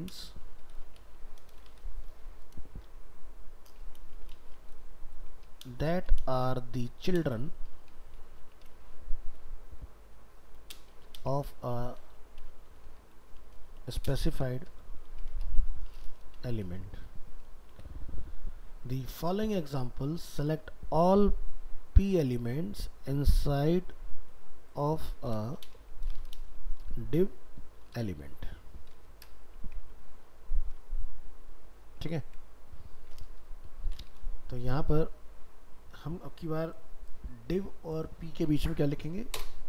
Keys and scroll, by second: 30.0 ctrl+s.